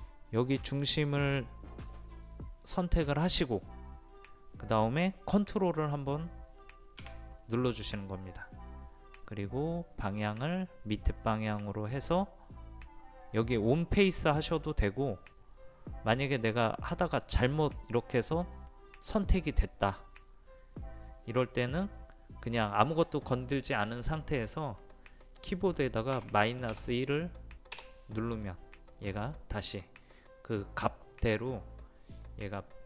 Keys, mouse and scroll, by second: 3.3 click, 19.1 click, 26.7 KP_1, 32.4-32.8 middle drag.